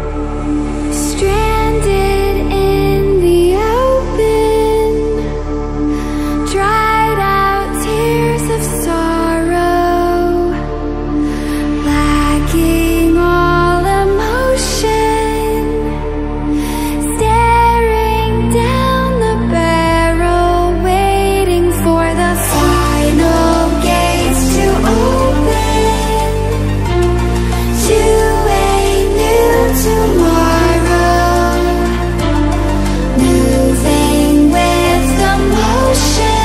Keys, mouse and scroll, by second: 2.2-7.5 drag, 8.1 scroll up 1, 10.4-28.9 drag, 29.3-29.7 scroll down 1, 31.4-36.4 drag.